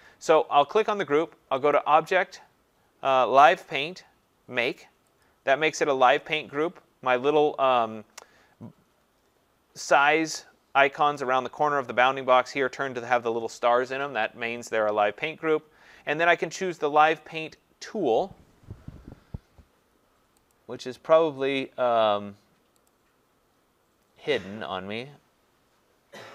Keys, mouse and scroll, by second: 1.7 click, 5.2 click, 20.5 click, 22.9 click, 24.5-25.5 scroll, 25.5 scroll.